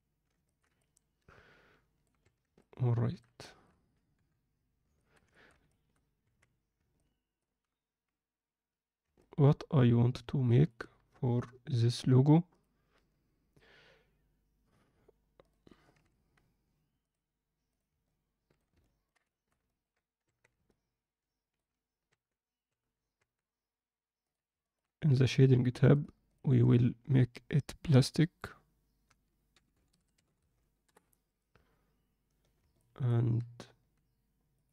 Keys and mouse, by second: 0.4 ctrl+middle click, 0.7-2.0 middle drag, 2.2 Tab, 2.5 middle click, 3.4 alt+shift+middle click, 4.1 KP_7, 4.9 ctrl+middle click, 5.3 alt+shift+middle click, 5.7 ctrl+alt+middle click, 6.2 Tab, 6.9 ctrl+middle click, 9.1-10.6 middle drag, 15.4 click, 15.9 alt+a, 17.0-17.9 drag, 18.0-18.5 middle drag, 18.8 ctrl+alt+middle click, 19.3 alt+shift+middle click, 19.6 ctrl+middle click, 20.2 Tab, 20.6 middle click, 22.1 Tab, 22.7 Tab, 23.1 Tab, 24.2 click, 24.6 ctrl+alt+middle click, 25.9 click, 32.7 middle click, 34.6 click.